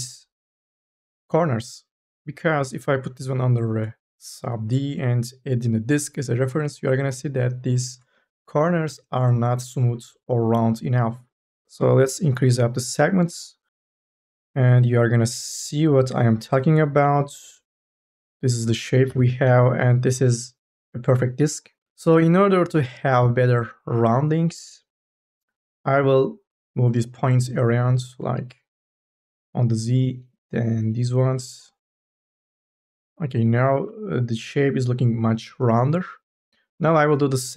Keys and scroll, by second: 0.0 3.